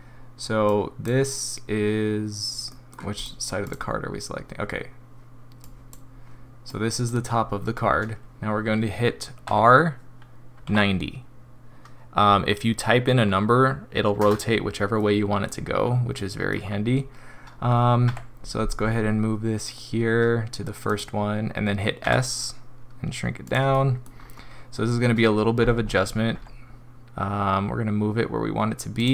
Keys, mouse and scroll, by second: 0.6 click, 2.7 middle click, 2.8 middle click, 3.1 click, 3.6 click, 5.6 click, 6.7 click, 9.5 r, 15.0 middle click, 15.5 scroll up 3, 16.1 middle click, 16.5 scroll down 2, 18.1 g, 22.0 s, 23.7 middle click, 24.1 scroll up 4, 26.3 g.